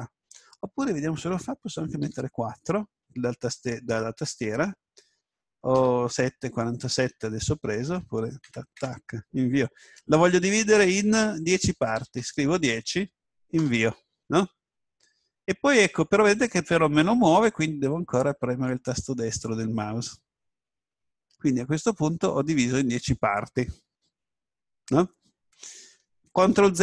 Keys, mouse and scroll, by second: 19.0 right click, 26.4 ctrl+z.